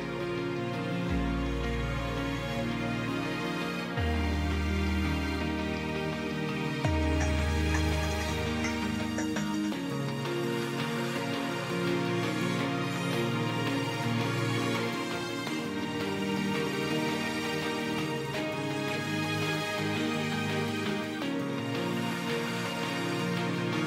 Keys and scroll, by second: 15.7 F6, 20.0 F6.